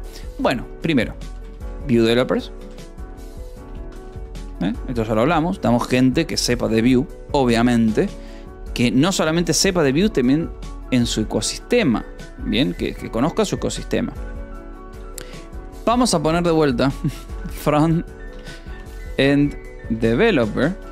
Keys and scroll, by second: 0.0-3.6 typing, 4.3 Escape, 5.1 ctrl+s, 11.2 e, 11.4 space, 14.9 u, 16.4-20.9 typing.